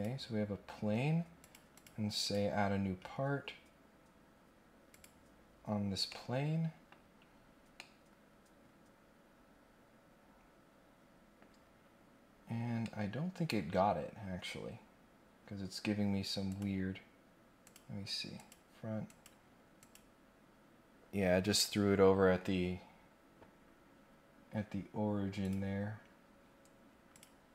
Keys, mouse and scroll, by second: 1.4 click, 1.7 click, 2.2 click, 4.9 click, 6.0 middle click, 7.1 scroll up 1, 7.4 scroll down 1, 7.7-11.3 middle drag, 11.5 scroll up 1, 11.7-12.3 scroll down 2, 12.3 scroll up 1, 12.8 middle click, 14.2 scroll up 1, 16.4 click, 17.6 click, 18.4 click, 19.0 click, 19.7 click, 23.0-23.7 scroll down 2, 23.9 scroll up 1, 24.4 scroll down 2, 25.4 click, 27.1 click.